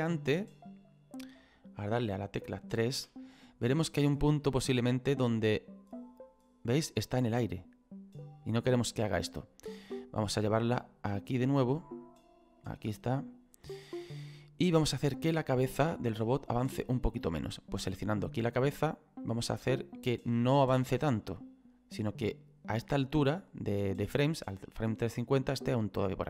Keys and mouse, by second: 3.0 KP_3, 4.3 shift+middle click, 5.1 click, 10.5 right click, 12.6 click, 18.9 right click, 19.7 click, 25.1 click.